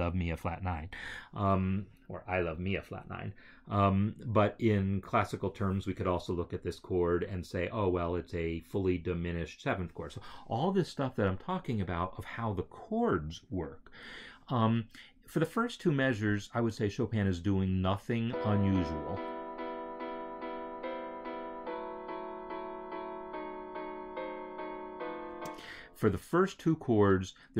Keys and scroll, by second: 18.1 space, 25.2 space.